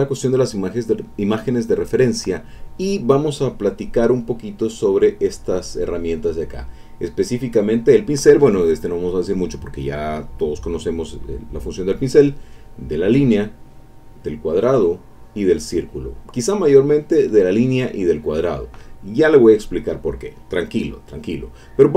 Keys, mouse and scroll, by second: 4.8 click, 5.3 click, 7.6 click, 12.3 click, 13.6 click, 14.7 click, 16.8 click, 17.5 click, 18.5 click.